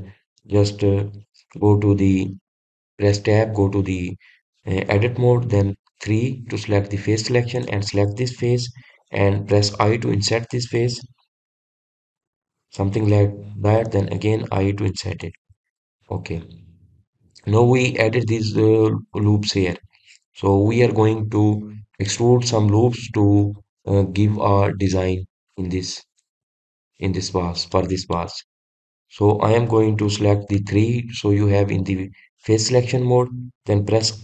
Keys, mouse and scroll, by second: 9.0 click, 16.7 click, 17.1-19.4 middle drag, 19.4-19.9 scroll up 1, 19.9-22.0 scroll down 2, 22.6-27.9 middle drag, 29.2 middle click, 30.0-32.0 scroll up 2, 32.0 3.